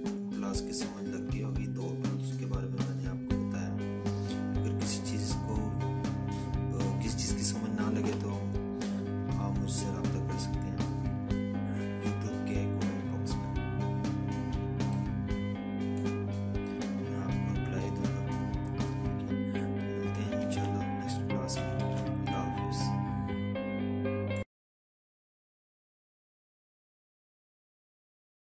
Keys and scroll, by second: 12.8 z, 18.7 ctrl+-, 19.9 ctrl+-, 20.1 ctrl+-.